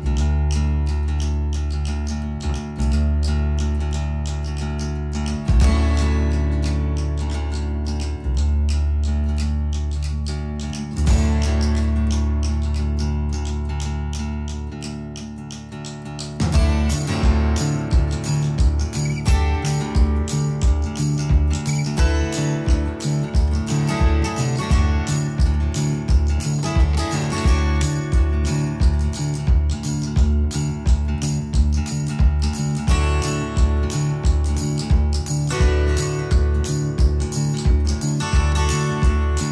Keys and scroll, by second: 3.0 Delete, 5.8 Delete, 14.2-14.8 typing, 15.8-19.5 typing, 22.5 BackSpace, 22.7 BackSpace, 23.5 e, 24.5-27.1 typing.